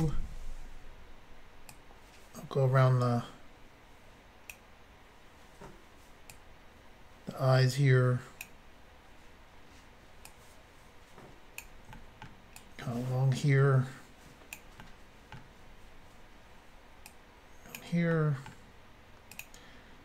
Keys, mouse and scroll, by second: 0.0 Return, 1.7 click, 6.3 click, 10.3 click, 12.0 middle click, 12.6 click, 14.8 middle click, 15.4-15.7 scroll up 1, 16.2-16.6 scroll down 1, 17.1 click, 18.1 middle click, 19.3 click, 19.4 click.